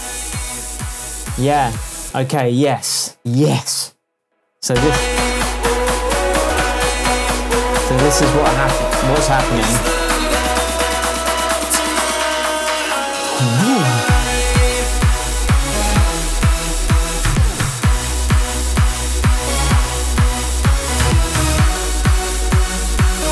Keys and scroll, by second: 2.0 space.